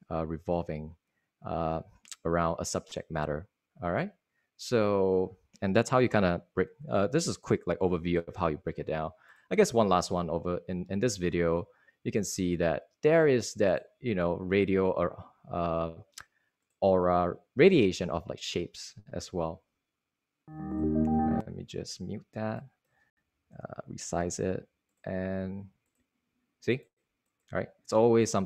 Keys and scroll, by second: 24.1 super+0.